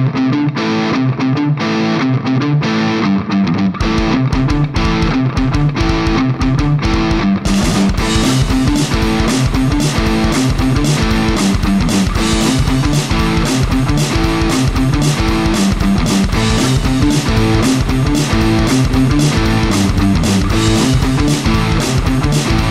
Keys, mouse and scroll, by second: 0.1 k, 5.3 u, 6.6-22.7 drag, 7.2 ctrl+z, 8.5 ctrl+z, 12.1 ctrl+z, 12.6 ctrl+z, 13.0 ctrl+z, 14.7 ctrl+z, 15.7 ctrl+z, 17.4 d, 17.6 u, 21.7 d, 22.3 k.